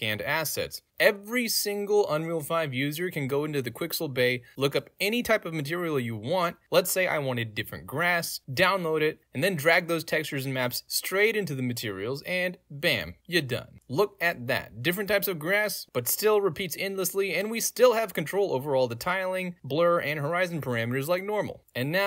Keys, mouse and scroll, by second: 1.1 middle click, 1.1-1.5 scroll up 2, 1.9 middle click, 1.9 scroll up 2, 1.9-2.3 scroll down 2, 2.5 click, 3.3 click, 6.1 click, 8.3 click, 9.0 middle click, 9.0 scroll down 2, 9.4-9.8 drag, 10.3-10.6 drag, 11.0-11.4 drag, 12.0 right click, 12.0 click, 15.5 click, 16.1-21.6 right drag, 21.8-22.0 drag.